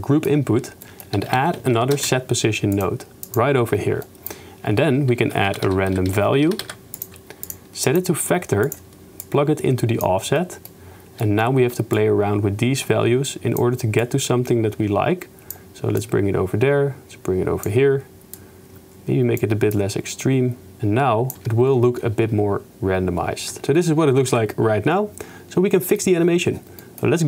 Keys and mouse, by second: 0.1 click, 0.9 click, 1.3 shift+a, 3.5 middle click, 4.1 click, 5.2 shift+a, 7.9-8.8 drag, 10.1 drag, 11.3-11.6 drag, 11.9-13.8 shift+middle drag, 14.2 shift+middle click, 15.2 shift+middle click, 16.2-17.4 shift+middle drag, 18.6-19.6 shift+middle drag, 19.8 shift+middle click, 20.5 click, 23.6 shift+space, 24.0 shift+space, 24.4 ctrl+s, 26.0 drag, 26.9 click.